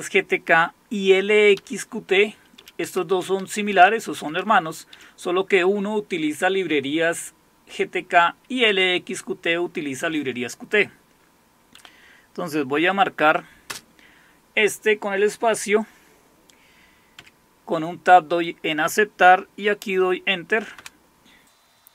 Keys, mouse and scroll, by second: 1.5 Down, 2.6 Up, 2.8 Down, 3.1 Up, 3.7 Up, 4.1 Down, 4.4 Down, 5.0 typing, 8.7 Down, 11.8 Up, 13.7 space, 17.2 Tab, 20.7 Return.